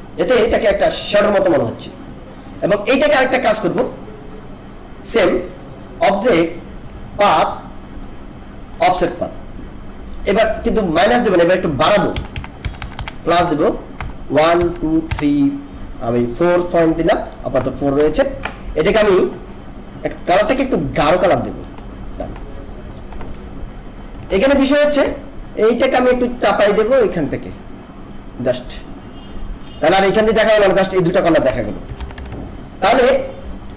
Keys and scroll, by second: 0.5 ctrl+-, 12.1 Up, 24.3 ctrl+=, 31.9 ctrl+-.